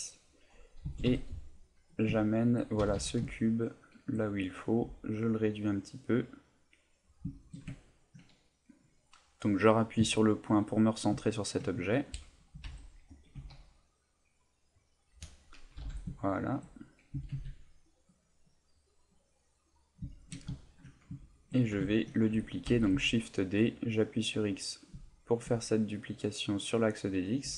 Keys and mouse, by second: 0.8 g, 2.0 click, 2.2 shift+middle click, 2.8 g, 4.1 shift+click, 4.3 middle click, 4.8 s, 7.0 right click, 7.3 shift+middle click, 7.7 ctrl+middle click, 8.4 middle click, 10.0 KP_Decimal, 10.8 middle click, 11.2 ctrl+middle click, 11.7 middle click, 12.5 g, 13.2 click, 14.8 click, 15.0 middle click, 15.8 g, 16.5 shift+click, 18.8 click, 19.0 middle click, 20.1 shift+middle click, 20.5 ctrl+middle click, 21.2 shift+middle click, 22.6 shift+d, 24.8 click, 25.0 shift+middle click, 25.5 middle click, 26.7 middle click, 27.4 s.